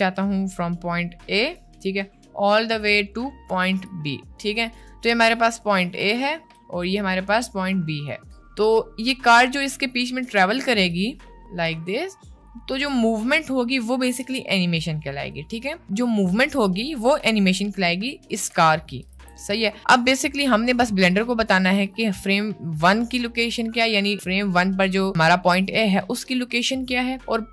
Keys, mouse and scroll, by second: 0.0-1.6 drag, 1.7-3.7 drag, 3.9-4.9 drag, 5.3 click, 6.7 click, 7.3 click, 11.0 click, 11.7 click, 12.4 click, 13.3 click, 14.7 click, 18.4 click, 19.2 ctrl+z, 21.9-23.2 drag.